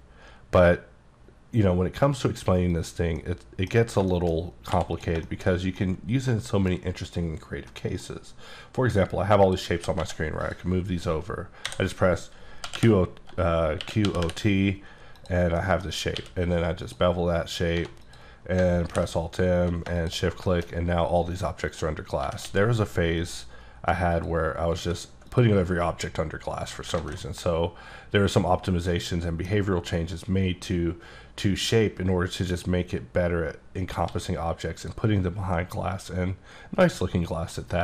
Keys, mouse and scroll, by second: 0.0-1.0 scroll up 1, 2.7 click, 3.2 middle click, 4.1 shift+middle click, 4.5 scroll up 1, 4.7 x, 5.0 click, 5.3 shift+middle click, 5.5 scroll down 2, 5.8 middle click, 7.7 middle click, 9.5 click, 9.8 g, 10.0 x, 10.4 click, 11.7 a, 12.6 o, 12.8 t, 13.8 q, 14.0 o, 15.2 click, 15.6 middle click, 16.2 q, 16.9 click, 17.3 scroll up 1, 17.8 1, 18.0 click, 18.9 alt+m, 20.0 shift+click, 20.5 shift+middle click, 21.7 click, 22.2 g, 22.5 x, 23.2 click, 24.1 click, 24.8 s, 25.3 click, 26.6 click, 27.0 alt+a, 27.5-29.7 middle drag, 32.5 click, 34.1 s, 34.8 click, 35.6 middle click.